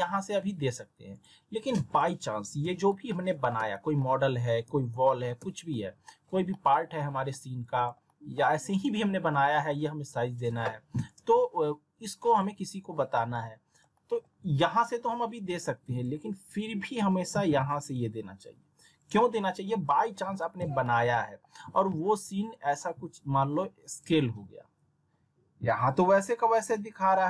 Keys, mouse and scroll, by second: 1.1 click, 2.6 z, 3.1 alt+middle click, 4.0 alt+middle click, 4.6 z, 5.1 alt+middle click, 5.4 z, 5.7-6.3 alt+middle drag, 7.1 scroll down 1, 7.3-8.4 alt+middle click, 8.0 alt+middle click, 12.2 click, 13.3-14.2 alt+middle click, 13.9 alt+middle click, 19.0 click, 20.1-20.7 alt+middle drag, 21.5 r, 22.5-24.1 drag.